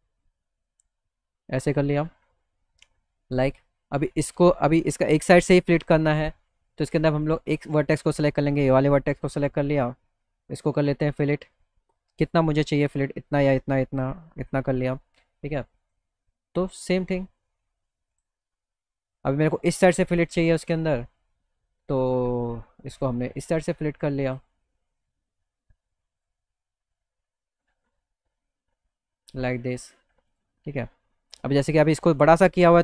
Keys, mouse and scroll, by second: 1.0 click, 3.4 click, 4.3 click, 6.8 click, 7.2 click, 8.2 click, 10.7-14.5 drag, 15.9 click, 18.1 click, 20.5 click, 22.9 click, 23.4 click, 24.1 click, 26.3 click, 27.7-29.5 drag, 30.3 click.